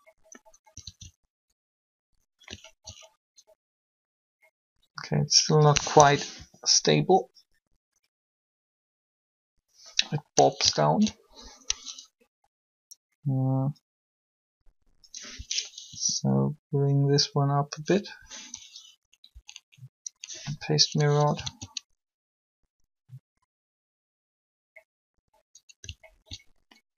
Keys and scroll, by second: 0.8 alt+a, 5.9 3, 15.9 r, 19.1 Up, 21.4 alt+a.